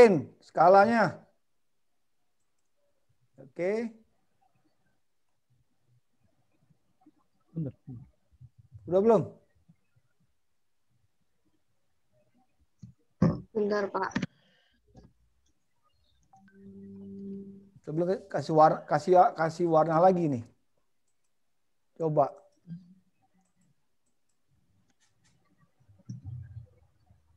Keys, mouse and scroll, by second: 0.9 s, 3.5 middle click, 6.7 scroll down 4, 9.7 middle click, 14.7 middle click, 16.9 middle click, 21.3 click, 23.4 click.